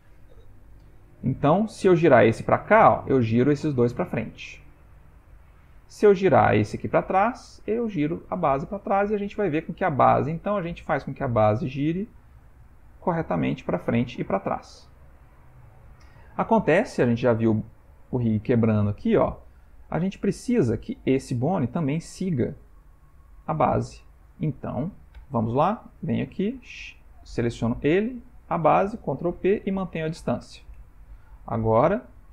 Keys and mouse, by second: 1.0 Tab, 1.8 click, 2.4 r, 6.3 click, 6.8 r, 10.0 click, 10.4 r, 12.2 click, 12.5 r, 16.8 r, 21.2 click, 25.3 Tab, 27.0 shift+click, 27.7 click, 28.5 shift+click, 29.4 ctrl+p, 30.6 Tab, 31.8 click, 32.2 r.